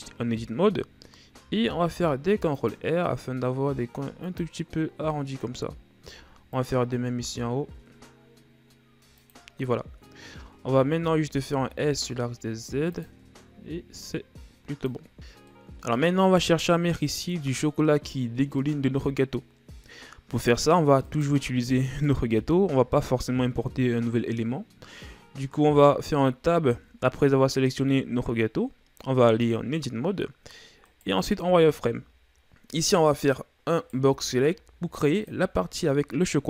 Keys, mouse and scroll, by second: 1.4 ctrl+r, 6.1 ctrl+r, 10.6 a, 11.0 a, 11.5 s, 14.0-15.1 drag, 15.1 Tab, 15.5-16.8 middle drag, 16.8 KP_1, 20.3-21.0 scroll up 2, 21.0 right click, 25.8 Tab, 30.9 right click, 31.4 z, 33.8 right click, 34.0 b.